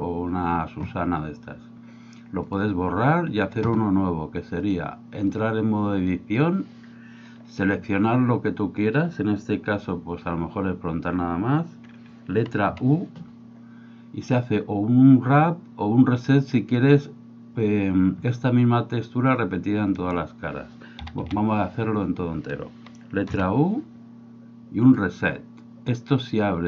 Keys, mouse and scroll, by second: 4.6 click, 12.7 u, 20.1 right click, 21.0 a, 21.3 a, 23.3 u.